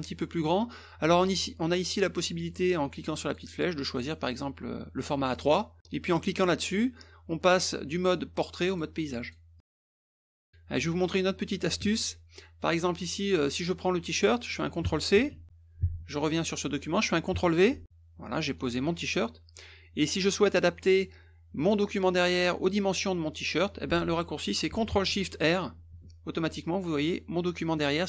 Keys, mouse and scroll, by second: 3.2 click, 5.3 click, 8.6 click, 9.2 click, 9.6 click, 11.8 alt+Tab, 12.7 click, 15.1 ctrl+c, 16.0 ctrl+v, 18.6 click, 21.6 click, 22.3 click, 25.7 ctrl+shift+r.